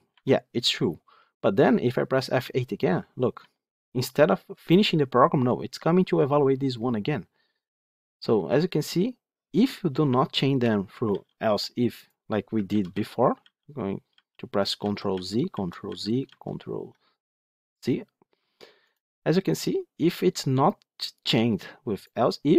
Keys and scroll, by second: 8.4 F8, 10.5 F9, 12.5 ctrl+z, 13.3 ctrl+z, 14.7 ctrl+z, 15.7 ctrl+z.